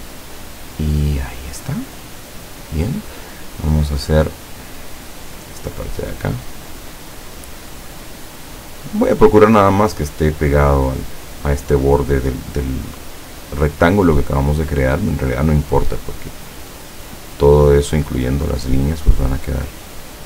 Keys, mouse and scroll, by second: 2.0 click, 5.8 click, 6.6-7.4 drag, 8.3 click, 17.1 click, 17.9-18.5 drag, 19.7 click.